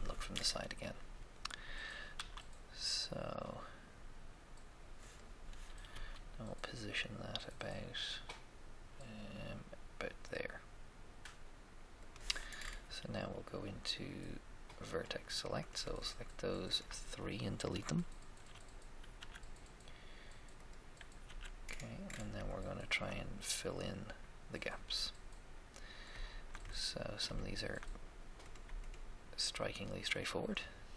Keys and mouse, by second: 0.3-2.1 middle drag, 2.1 s, 2.1 s, 5.9 g, 6.1 g, 12.5 middle click, 14.9 click, 16.8-18.5 shift+right drag, 18.5 z, 19.1 x, 19.3 x, 21.2 z, 28.5-29.9 right drag.